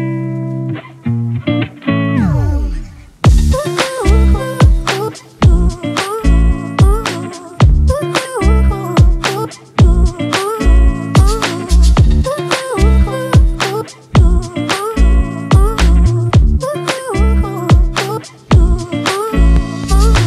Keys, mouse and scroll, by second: 3.8 Up, 4.4 Down, 8.8-12.2 scroll up 1.